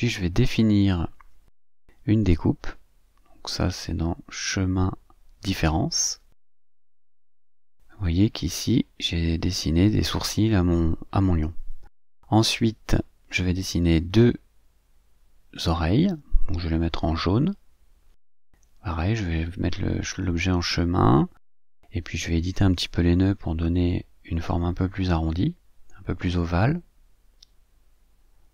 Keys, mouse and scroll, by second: 0.7-2.3 drag, 3.1 middle click, 4.7 click, 6.1-7.7 drag, 12.8 click, 16.1 click, 18.1 click, 20.2 click, 20.9 click, 22.6 click, 25.9-27.0 drag, 27.9 click.